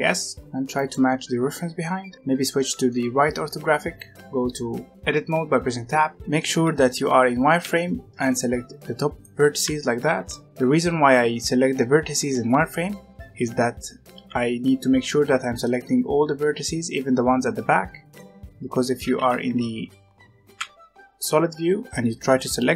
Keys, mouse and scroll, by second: 1.1-1.8 scroll down 2, 1.8-3.1 middle drag, 3.1-4.2 scroll up 3, 4.2 Tab, 4.9-6.1 shift+middle drag, 6.9 z, 8.1 b, 9.6 alt+a, 10.0 b, 14.0 z, 15.0 scroll down 1, 15.1-18.3 middle drag, 18.3-18.9 scroll up 1, 18.9 alt+a, 19.2 z, 22.2 b.